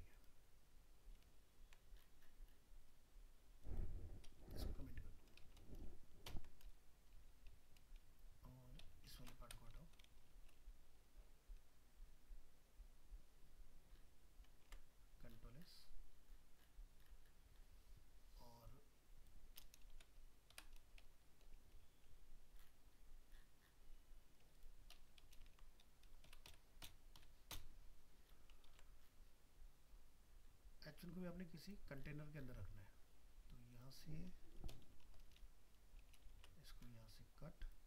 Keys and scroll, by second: 1.2 ctrl+z, 10.3 ctrl+End, 14.7 ctrl+s, 25.5 ctrl+x, 28.7 ctrl+s, 36.3 ctrl+x.